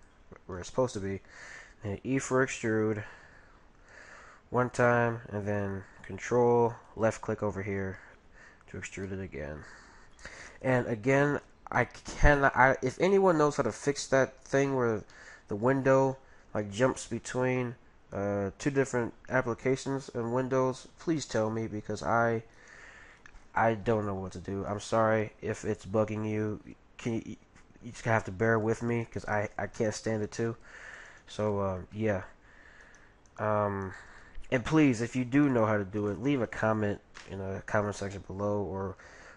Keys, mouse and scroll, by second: 1.5 e, 4.6 e, 6.9-8.6 drag, 9.1-11.0 middle drag, 11.8-13.5 middle drag, 13.8-17.0 middle drag, 21.2-22.8 middle drag, 22.5-24.2 right drag, 27.1-29.0 middle drag, 29.0-37.2 right drag, 31.9-33.6 middle drag, 34.2-35.9 middle drag, 38.8 g.